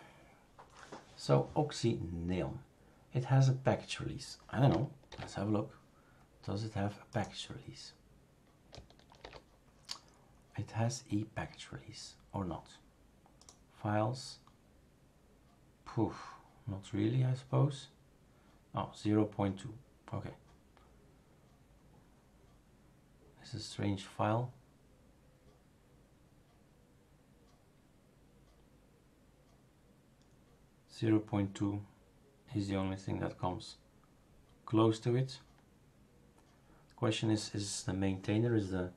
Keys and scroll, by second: 5.1 super+f, 9.2 super+f.